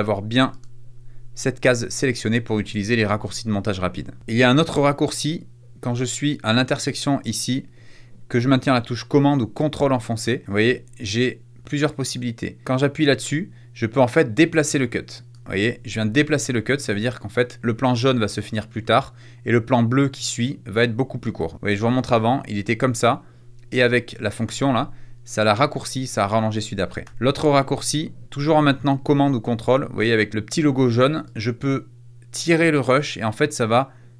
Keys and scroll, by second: 24.4 shift+super+z, 27.0 super+z.